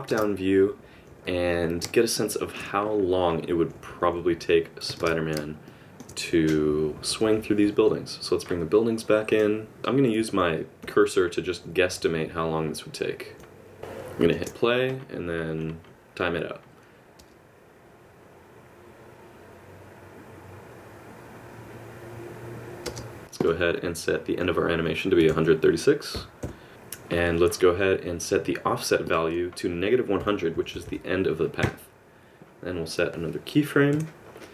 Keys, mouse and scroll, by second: 0.1 ctrl+space, 0.5 KP_Subtract, 0.7 KP_Subtract, 2.3 shift+middle click, 3.5 KP_Subtract, 5.0 ctrl+space, 5.6 shift+middle click, 6.5-8.0 KP_Subtract, 9.7 click, 9.8 middle click, 10.8 KP_7, 11.4 KP_Subtract, 11.9-12.6 KP_Add, 12.6 KP_6, 13.8 KP_Add, 13.8 shift+middle click, 13.8 KP_4, 13.8 KP_5, 30.8 KP_0.